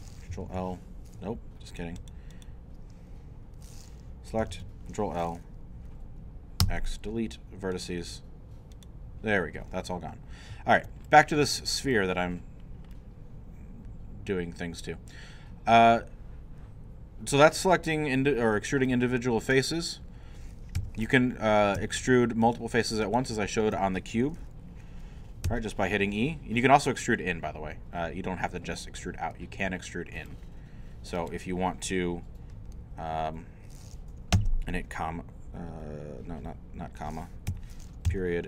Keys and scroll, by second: 0.5 ctrl+l, 1.2 ctrl+Escape, 4.5 ctrl+l, 6.6 x, 20.8 3, 21.8 shift+3, 25.4 e, 34.3 ,, 37.5 Escape, 38.1 ..